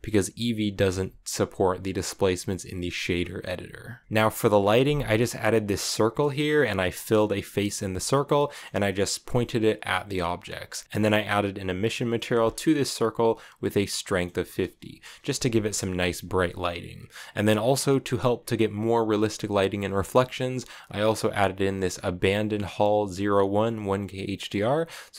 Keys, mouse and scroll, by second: 4.0-5.4 shift+middle drag, 5.4 Tab, 5.5-7.6 middle drag, 7.6 Tab, 8.0-9.5 middle drag, 9.5-10.8 scroll up 9, 10.5 middle click, 10.8-11.9 middle drag, 11.9-12.3 scroll up 4, 13.8 middle click, 14.7 KP_0, 15.2 z, 17.0 click, 21.4-24.4 drag.